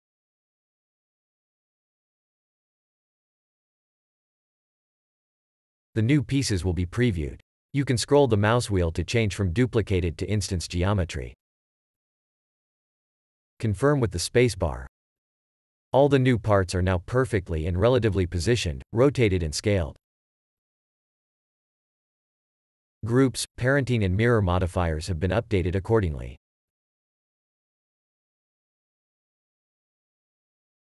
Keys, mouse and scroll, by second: 0.6 click, 1.9 click, 3.8 shift+click, 5.5 shift+click, 7.3 shift+click, 9.4-10.5 scroll down 1, 10.5-10.9 scroll up 1, 11.1-11.6 scroll down 1, 14.7-15.8 scroll down 1, 14.7 space, 15.8 a, 18.9 shift+click, 19.0 shift+click, 19.4 g, 19.7 Escape, 20.0 a, 20.4 shift+click, 20.4 scroll down 1, 20.5 shift+click, 20.9 g, 21.4 Escape, 21.8 a, 22.5 shift+click, 22.7 shift+click, 23.0 g, 23.3 Escape, 23.6 a, 29.9 F1, 30.5 F1.